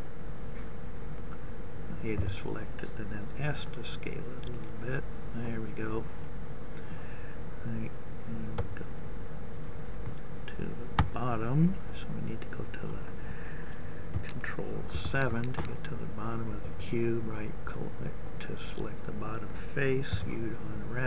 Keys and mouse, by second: 1.1 s, 13.1 ctrl+KP_7, 17.3-18.5 drag, 19.6 u.